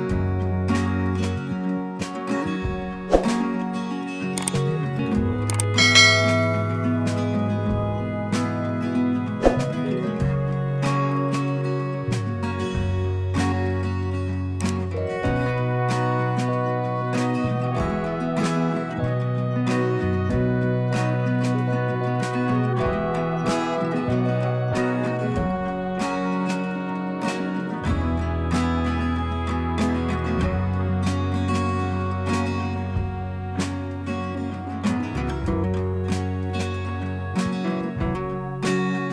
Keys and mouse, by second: 3.3 click, 5.5 click, 7.5 click, 10.0-14.3 drag, 17.6 click, 19.6 shift+click, 23.1 shift+click, 30.9 shift+click, 32.8 click, 37.3 alt+click.